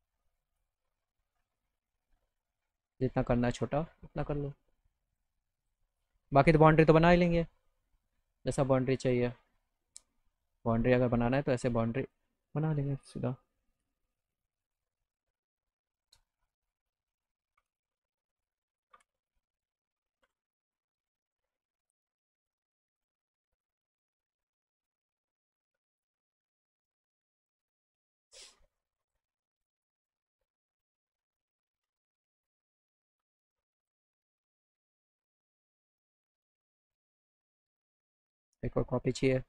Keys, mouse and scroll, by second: 0.4 click, 1.9-4.3 drag, 5.1 click, 5.6 click, 6.0 click, 6.4 right click, 8.2 click, 9.0 click, 9.6 click, 11.1-12.2 drag, 14.4 click, 18.3 click, 19.0 f, 19.3 click, 20.7 middle click, 22.0 click, 23.9-26.0 drag, 26.4 click, 27.4 click, 29.0 click, 29.5 click, 29.9 click, 30.9 click, 31.9 alt+middle click, 32.2 alt+right click, 32.6 alt+middle click, 33.8 p, 35.9 click, 37.1 click, 38.3 shift+click.